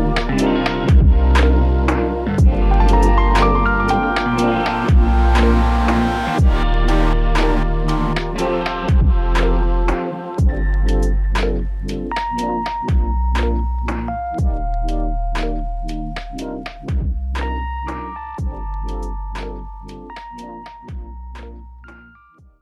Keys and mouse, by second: 3.7 double click, 11.6-13.1 typing, 17.2 shift+click, 19.7 shift+click, 21.6 alt+click.